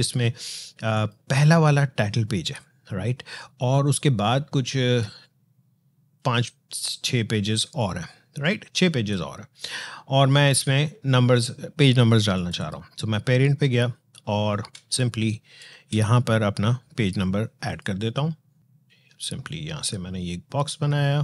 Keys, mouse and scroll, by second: 0.8 click, 3.3 scroll down 1, 7.6 alt+scroll down 1, 8.2 alt+scroll up 1, 8.9 space, 12.1 click, 13.6 alt+scroll up 1, 14.1 alt+scroll down 1, 14.5 space, 14.7 click, 15.1 space, 17.5 click, 19.2-21.2 drag.